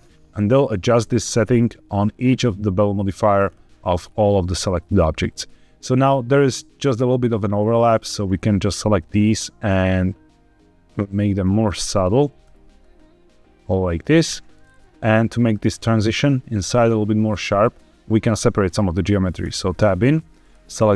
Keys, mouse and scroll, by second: 0.5 middle click, 3.3-3.6 scroll up 3, 3.9-4.8 scroll down 1, 4.8 middle click, 5.7-6.5 scroll up 3, 7.5 click, 9.0-11.3 shift+drag, 11.8 click, 12.7-14.2 shift+drag, 14.5-14.8 scroll down 3, 19.3 Tab, 20.3 click.